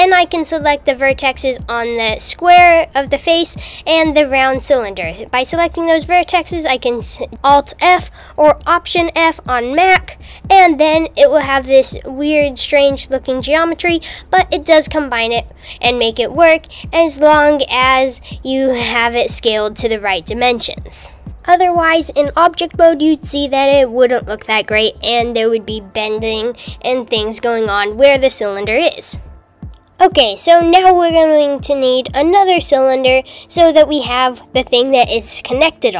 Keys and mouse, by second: 1.2 click, 1.3 click, 8.3 alt+f, 11.9 click, 12.0 click, 17.4 alt+f, 19.6 Tab, 22.3 Tab, 26.0 click, 28.0 s, 29.3 Tab, 30.7 shift+a, 32.3 click, 32.9 Tab, 33.6 click, 35.3 click.